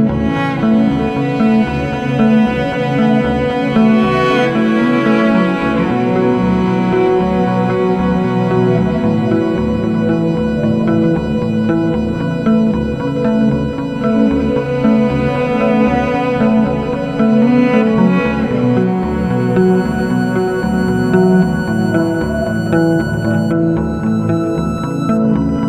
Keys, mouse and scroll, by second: 1.5 F9, 2.0 click, 3.6 click, 6.2 click, 8.3 click, 10.7 click, 12.0 F4, 12.6 F9, 14.1 F9, 14.6 click, 14.9 ctrl+o, 15.9-16.9 scroll down 1, 17.6 click, 18.9 click, 22.6 F4, 25.3 F9.